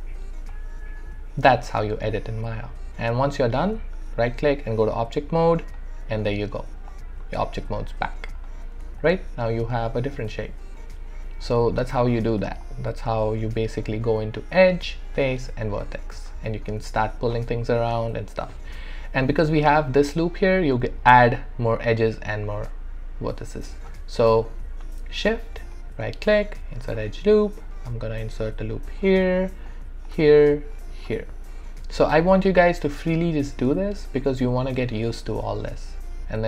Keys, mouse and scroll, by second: 3.7-7.4 right drag, 7.7 click, 7.8 alt+click, 9.0-12.0 alt+drag, 11.8 click, 12.7 alt+middle click, 13.2 alt+right click, 13.6-15.7 alt+drag, 25.7 shift+right click, 28.2-30.7 drag.